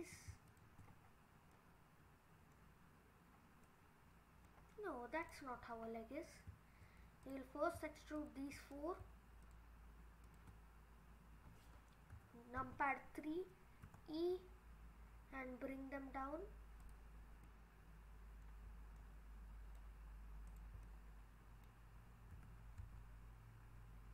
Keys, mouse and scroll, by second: 0.5 click, 0.9-1.5 scroll down 5, 1.5 middle click, 2.9-3.4 scroll up 3, 3.7 middle click, 5.2 click, 5.7-6.2 scroll down 2, 7.2 click, 8.2 shift+click, 9.4 click, 10.3 shift+click, 12.1 KP_3, 13.8 e, 17.3 scroll down 2, 17.5 middle click, 18.4 middle click, 18.7 scroll up 3, 19.0 middle click, 20.5 click, 20.9 middle click, 21.0 middle click, 22.3 e.